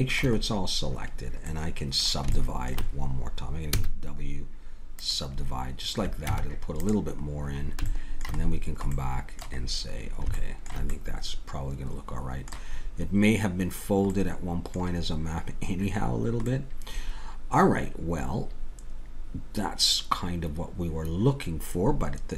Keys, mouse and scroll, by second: 3.8 w, 6.3 Tab, 7.3-10.9 middle drag, 16.5-18.2 middle drag.